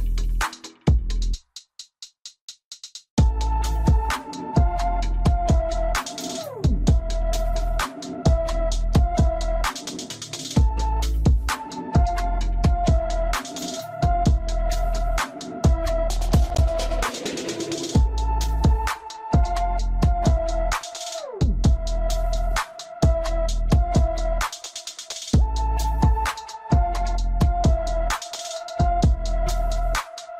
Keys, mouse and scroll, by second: 0.2 Tab, 3.4 click, 6.7-9.7 middle drag, 10.0 KP_1, 10.9 Tab, 12.2 click, 15.4 click, 19.1-22.1 middle drag, 23.8 KP_1, 24.5 Tab, 26.4 click.